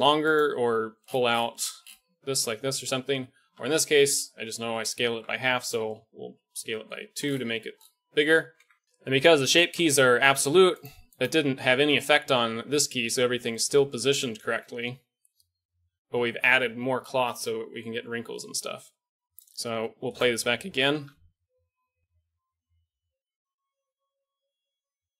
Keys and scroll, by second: 0.6 g, 3.4 a, 3.6 a, 5.0 s, 8.5 Tab, 11.7 Tab, 14.4 Tab, 21.0 alt+a.